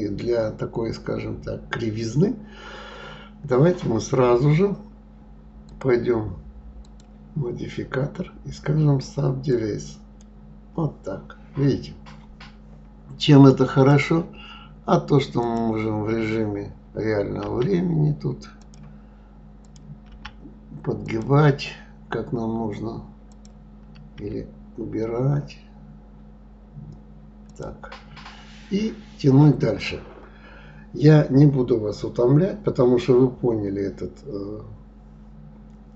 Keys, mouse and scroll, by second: 5.6 click, 6.8-9.8 drag, 11.3-12.5 scroll up 2, 13.9 click, 15.4 click, 17.4 g, 19.6 click, 20.1 g, 23.3 click, 24.2 g, 29.3-32.4 scroll down 4, 33.4-33.9 scroll up 3.